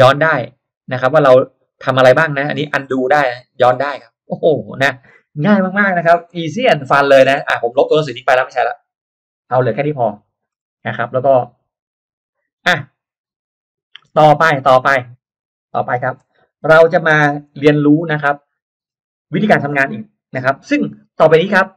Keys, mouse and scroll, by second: 0.1 click, 0.7 click, 1.2 click, 1.7 click, 2.2 click, 2.6 click, 3.1 click, 3.5 click, 6.4 middle click, 6.8-7.5 scroll down 1, 7.3 space, 7.8 click, 9.2 Delete, 10.2 click, 10.5 scroll up 1, 11.0 middle click, 11.0-11.5 scroll up 2, 11.4 click, 13.4 middle click, 13.8-14.1 scroll down 1, 14.7 drag, 15.4 click.